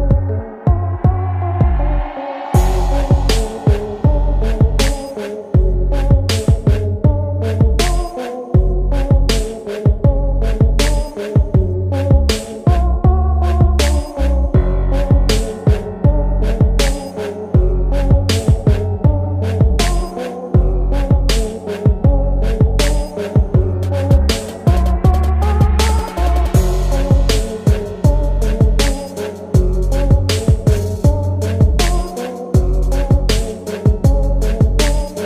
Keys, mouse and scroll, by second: 5.2 s, 7.3 e, 9.9-10.7 scroll down 2, 11.3 s, 14.5 e, 17.5 s, 20.5 e, 23.8 e, 28.0 g, 31.3 Tab, 31.8-35.2 middle drag.